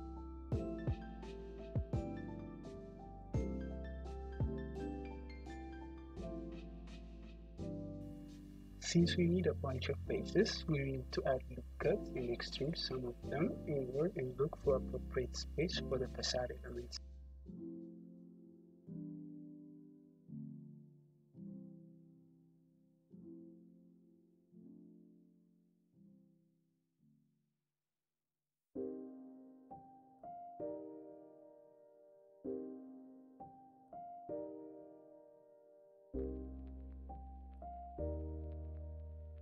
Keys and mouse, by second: 0.0 middle click, 0.7 shift+h, 2.5 `, 6.1 click, 9.4 Tab, 10.1-14.0 middle drag, 10.7 `, 11.6 `, 12.0 `, 13.6 2, 14.9 ctrl+r, 17.7 Escape, 18.0-19.7 drag, 18.7 `, 19.7-23.0 middle drag, 20.8 `, 21.6 3, 25.3 e, 27.5 alt+middle click, 27.9 e, 28.8-30.3 drag, 32.4 ctrl+r, 34.2 click, 34.4 3, 34.9 alt+middle click, 35.1-39.4 drag, 35.8 e.